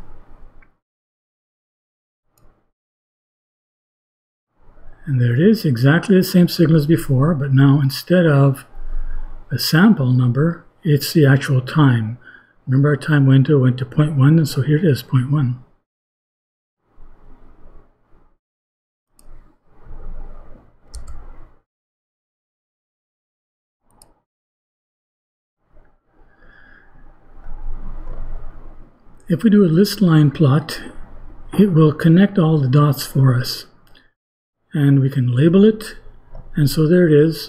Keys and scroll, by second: 20.7 ;.